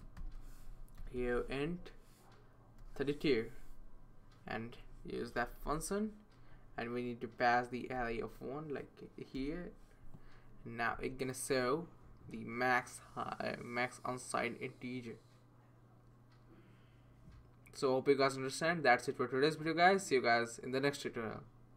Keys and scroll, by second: 0.2-3.5 typing, 5.3-5.6 typing, 8.0 Left, 9.3 typing, 10.8 typing.